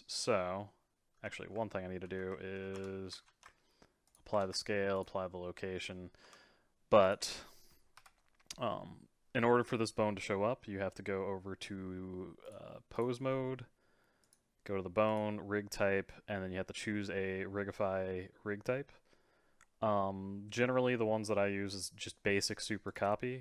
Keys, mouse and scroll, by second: 0.1-1.2 scroll up 3, 1.2 a, 2.0 ctrl+a, 2.7 Tab, 3.2 ctrl+a, 4.4 ctrl+a, 5.8 middle click, 6.3 Tab, 7.0 click, 8.0 KP_3, 8.7-11.7 scroll up 3, 12.4-14.3 drag, 15.1-18.2 drag.